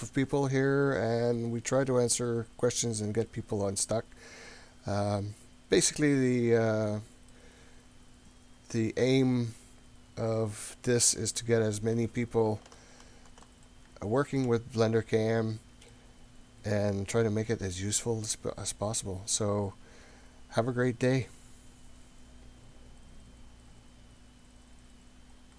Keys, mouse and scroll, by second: 2.5-3.3 scroll down 3, 7.3-12.0 middle drag, 12.8-13.5 ctrl+middle drag, 13.7-14.5 shift+middle drag, 14.6 scroll up 2, 15.0 scroll down 1, 15.9-17.5 middle drag.